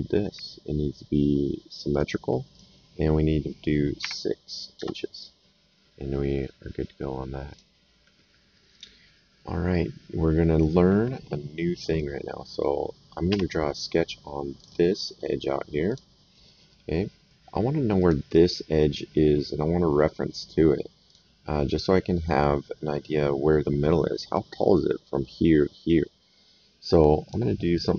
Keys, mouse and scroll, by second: 1.9 click, 4.0 KP_6, 4.7 Return, 6.1 middle click, 7.5 click, 13.2 s, 14.5 click, 15.8 click, 17.9 click, 21.0 click, 27.2 click.